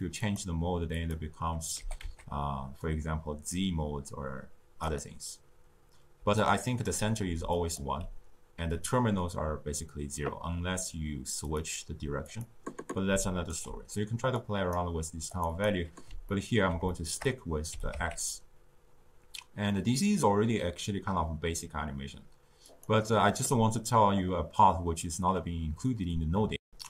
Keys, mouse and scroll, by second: 0.2-1.8 drag, 1.8 g, 6.1-7.9 typing, 6.3 right click, 7.5 click, 11.5 click, 12.2 click, 13.0 d, 13.2 right click, 13.5 d, 14.3 click, 15.2-16.2 drag, 16.2-17.7 ctrl+middle drag, 17.7 g, 26.5 ctrl+alt+shift+q.